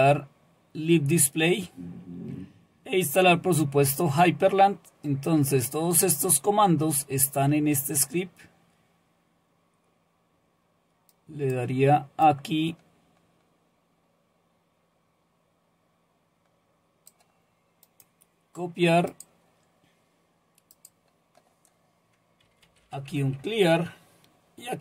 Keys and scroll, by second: 22.2-23.6 typing.